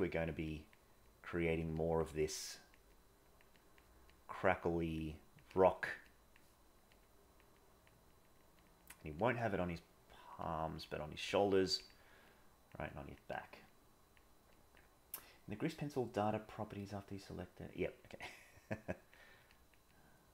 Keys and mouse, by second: 0.5 click, 1.1 click, 1.8 click, 2.5 click, 3.0 click, 3.6 click, 4.0 click, 4.6 click, 5.2 click, 6.1 click, 6.6 click, 6.9 click, 7.6 click, 8.0 click, 8.3 click, 8.8 click, 9.2 click, 9.5 click, 9.9 click, 10.4 click, 10.8 click, 12.3 click, 12.9 click, 13.7 click, 14.6 click, 18.8 click, 19.5 click, 19.9 click.